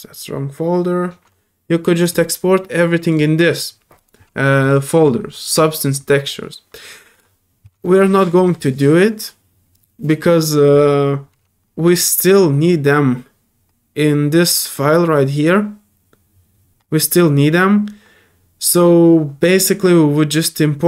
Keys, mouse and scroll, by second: 2.0 click, 3.0 click, 4.6 click, 4.7 click, 7.1 click.